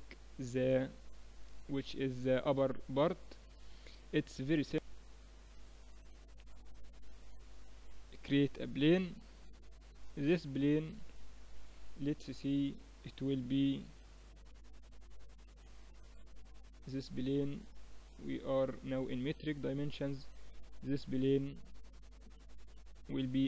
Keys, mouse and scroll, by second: 1.4-3.9 middle drag, 7.0 shift+a, 9.3-11.8 middle drag, 12.4 KP_7, 13.5 n, 14.9-16.7 drag, 18.0-23.4 drag.